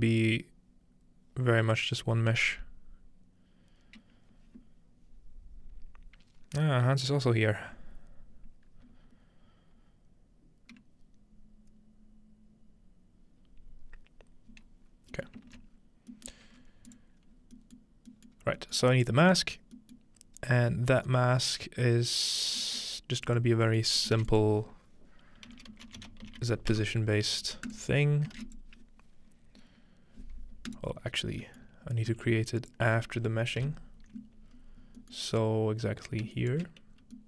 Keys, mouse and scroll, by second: 15.1-17.0 ctrl+middle drag, 15.7-16.1 scroll down 2, 16.6 scroll up 2, 16.9-18.4 drag, 18.3 scroll down 1, 18.4 scroll up 2, 18.9 scroll down 1, 20.2-21.8 scroll up 2, 21.8-23.3 scroll down 2, 23.3 click, 23.8 scroll down 1, 24.0 scroll up 2, 24.2 typing, 25.4-27.2 typing, 27.7 click, 28.4 shift+a, 28.5 shift+click, 30.7 right click, 31.2 scroll down 2, 32.1 g, 32.6 click, 33.7 alt+click, 33.7 typing, 34.5-36.3 scroll up 1, 34.9 typing, 36.4 shift+right click, 36.9-37.2 scroll down 2.